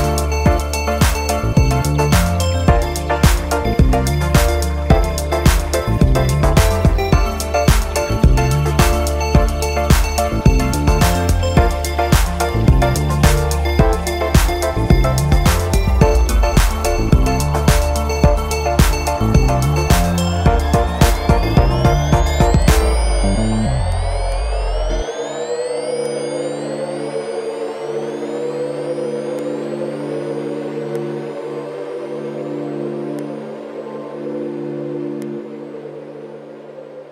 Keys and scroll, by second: 4.5 super+i.